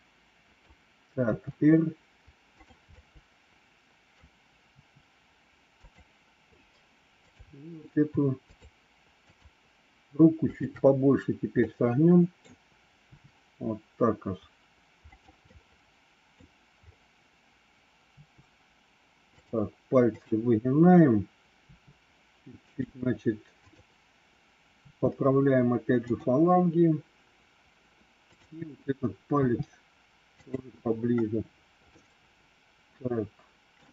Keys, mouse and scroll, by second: 1.3 r, 2.9-4.1 middle drag, 4.8 r, 7.3 click, 8.4-9.9 shift+drag, 10.5 shift+click, 11.6 middle click, 13.0 r, 15.4 middle click, 18.0 r, 21.5 r, 23.6 click, 28.2 click, 29.2 r, 31.9-33.7 middle drag.